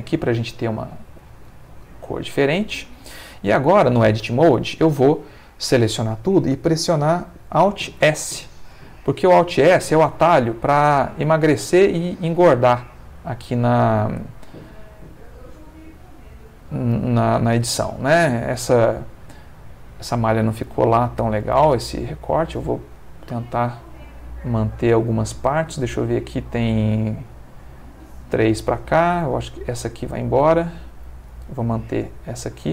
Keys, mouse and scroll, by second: 0.6 ctrl+shift+Caps_Lock, 3.4 middle click, 4.2 Tab, 5.0 a, 6.9 Caps_Lock, 8.0 alt+s, 16.3 Escape, 16.7-20.3 middle drag, 20.9 alt+click, 21.5 alt+x, 22.4 click, 22.9-26.2 middle drag, 26.5 middle click, 28.5 middle click, 29.6 alt+click, 30.3 alt+x, 30.7 alt+click, 31.2-32.7 alt+middle drag.